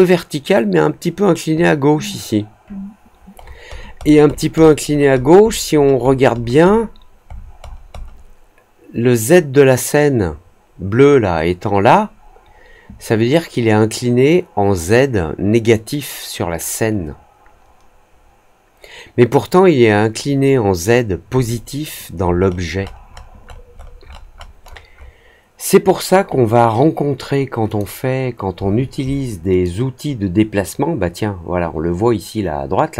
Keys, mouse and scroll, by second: 3.3-3.8 scroll down 2, 3.9 middle click, 4.2 middle click, 4.5 middle click, 4.8 middle click, 5.1 middle click, 5.4 middle click, 5.7 middle click, 6.0 middle click, 6.3 middle click, 6.6 middle click, 7.2 middle click, 7.5 middle click, 7.9 middle click, 21.4 alt+click, 22.3 middle click, 22.7 middle click, 23.0 middle click, 23.3 middle click, 23.7 middle click, 24.0 middle click, 24.3 middle click, 24.6 middle click, 24.9 middle click, 27.6 click, 29.6-32.9 drag.